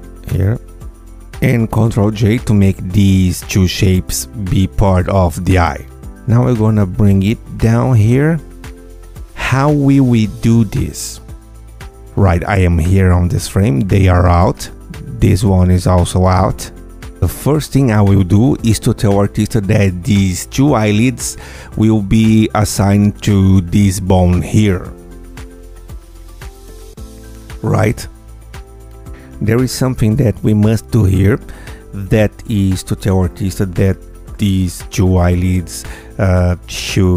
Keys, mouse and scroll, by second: 0.6 ctrl+click, 2.6 ctrl+j, 4.1 Tab, 4.5 click, 5.3 click, 5.8 g, 8.6 click, 11.4 click, 13.3 g, 14.1 click, 15.0 click, 15.9 g, 17.2 click, 18.3 ctrl+click, 24.0 ctrl+click, 25.6 ctrl+b, 29.6-32.4 drag, 36.0 click, 36.7 click.